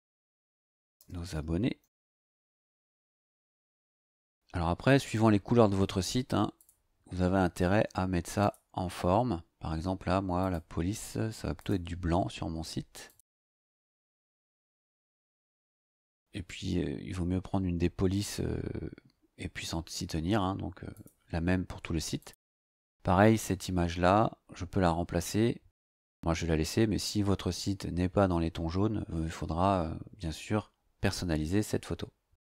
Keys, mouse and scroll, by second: 0.1-3.0 typing, 6.6 click, 8.4 click, 10.4 click, 11.6 click, 13.0 click, 14.0 click, 15.1 scroll down 1, 17.5 scroll down 1, 20.9 click, 22.2 click.